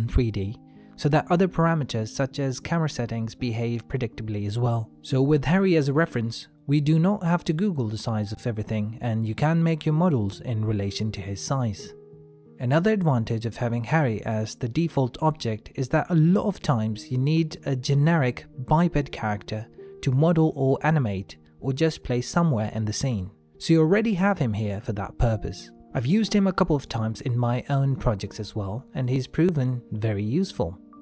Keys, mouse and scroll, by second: 0.3 shift+middle click, 1.3 middle click, 4.5 middle click, 9.0 Tab, 10.1 shift+middle click, 11.0-11.4 scroll up 1, 11.5 shift+middle click, 11.9 middle click, 20.2 shift+middle click, 21.7 Tab, 23.2 middle click, 25.4 shift+middle click, 29.0 n.